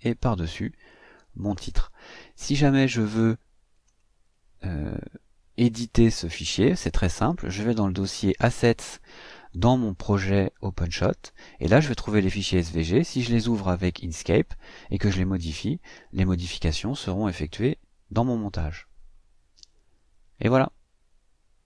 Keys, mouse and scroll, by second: 3.8 click.